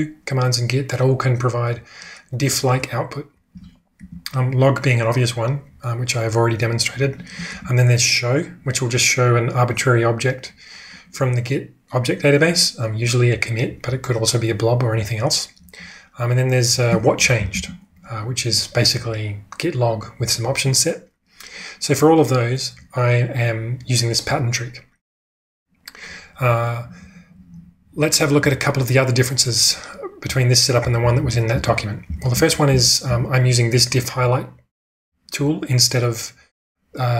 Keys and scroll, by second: 17.1-18.0 typing, 30.2-33.5 typing.